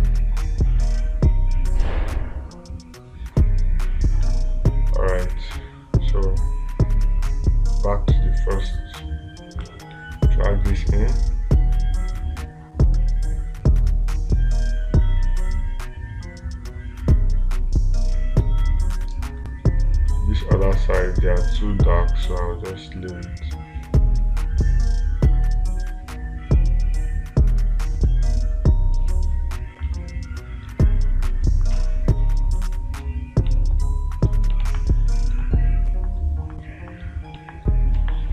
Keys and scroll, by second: 35.1 space.